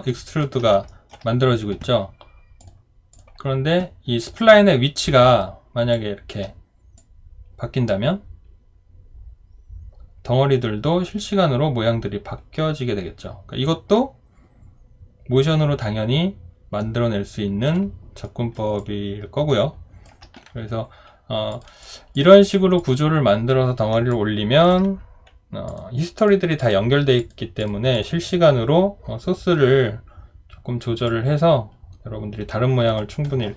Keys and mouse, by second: 0.1 alt+right click, 0.9 alt+middle click, 5.9 alt+click, 18.2 alt+right click, 18.8 alt+click, 24.1 alt+click.